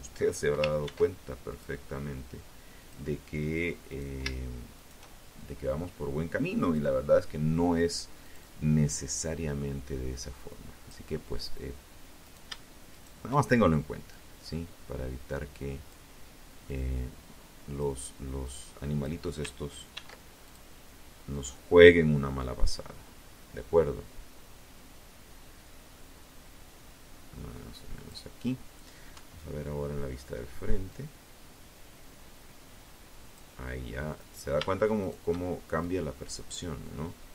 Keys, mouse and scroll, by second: 0.9 click, 2.1 right click, 2.9 shift+right click, 3.5-5.1 shift+drag, 6.3-9.2 drag, 10.4 shift+right click, 11.1 shift+right click, 12.3-14.3 drag, 14.8-16.1 drag, 16.6 click, 18.1 ctrl+e, 18.6 ctrl+click, 19.5 click, 20.5-26.5 drag, 27.3 KP_1, 29.1-31.7 drag, 32.3 right click, 33.2 shift+right click, 34.0 click, 35.0-36.5 drag, 36.9 right click.